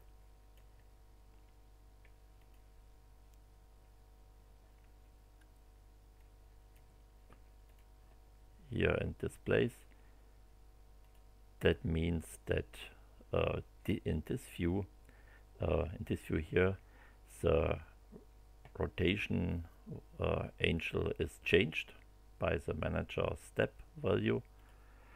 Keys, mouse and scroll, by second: 2.3 click, 6.1 click, 7.6 click, 9.6 click, 11.0 click, 24.5 click.